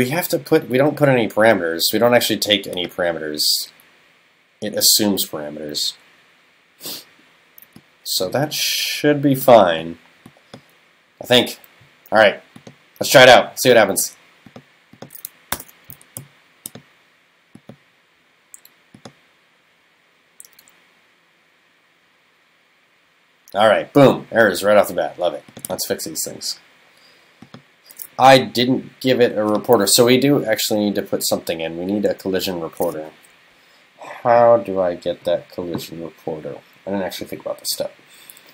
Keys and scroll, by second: 15.6 super+BackSpace.